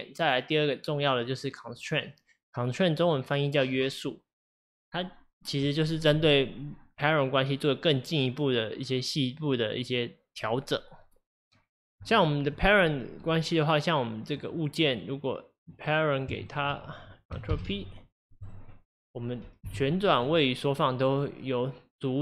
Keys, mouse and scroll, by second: 12.5 click, 14.4 click, 14.9 click, 15.6 click, 16.5 shift+click, 17.5 ctrl+p, 19.0 click, 19.7 g.